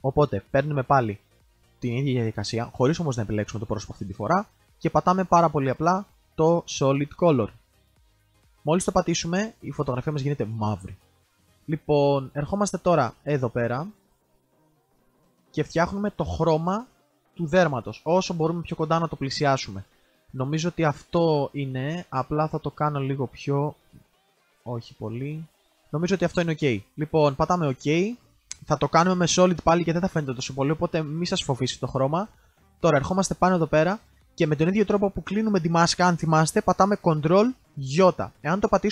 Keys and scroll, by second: 37.7 ctrl+i.